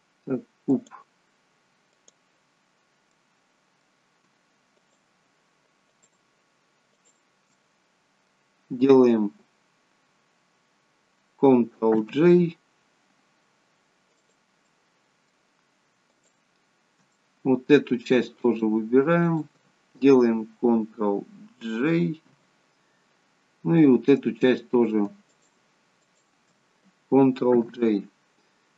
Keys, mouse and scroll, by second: 0.7 click, 3.1 middle click, 4.8 shift+click, 7.1 shift+click, 7.5 middle click, 12.0 ctrl+j, 14.3 click, 14.7 middle click, 16.1 shift+click, 17.2 middle click, 18.5 shift+click, 24.4 click, 25.3 shift+click, 26.5 click, 27.6 ctrl+j.